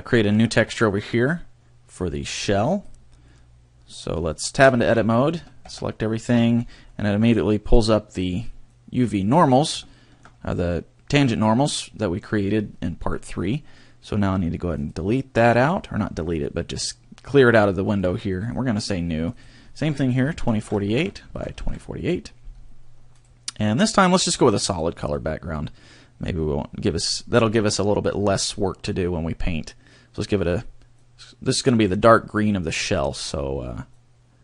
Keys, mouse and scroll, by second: 2.3 click, 3.3 middle click, 4.8 Tab, 5.4 a, 5.7 a, 6.3 scroll down 1, 6.9 middle click, 8.7 click, 9.9 shift+middle click, 10.4 scroll up 1, 11.3 middle click, 14.7 click, 18.4 click.